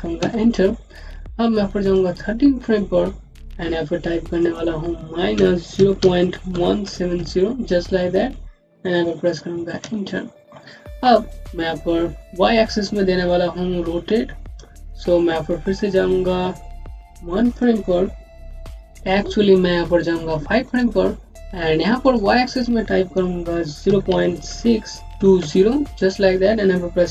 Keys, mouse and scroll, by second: 0.1 Return, 1.7 click, 4.3 click, 7.6 KP_0, 9.7 KP_Enter, 10.4-12.0 scroll up 1, 17.3 scroll up 1, 17.4 click, 20.5 click, 23.7 KP_0, 25.9 KP_0.